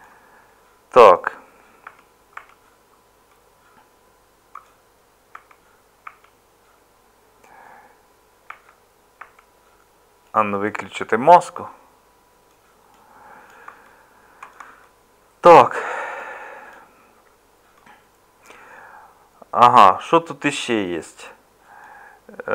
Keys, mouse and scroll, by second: 1.9 Tab, 2.4 Tab.